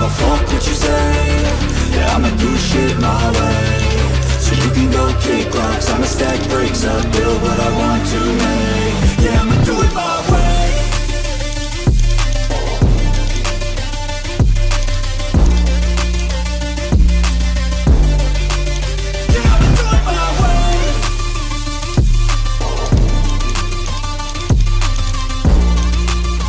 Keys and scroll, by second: 5.0-5.4 typing, 8.8-9.5 typing, 14.0-14.8 typing, 19.7-20.5 typing.